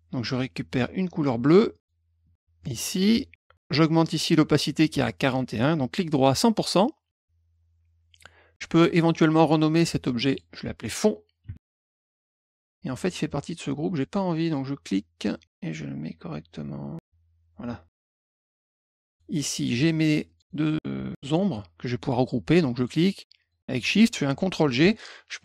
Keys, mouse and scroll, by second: 1.7 click, 2.6 click, 5.5 right click, 6.2 click, 10.0 click, 10.2 click, 11.1-12.0 typing, 12.1 click, 12.3 click, 13.9-17.0 drag, 18.7 click, 19.7 click, 20.2 click, 21.2 click, 22.7 click, 23.4 shift+click, 24.6 ctrl+g, 25.3 click.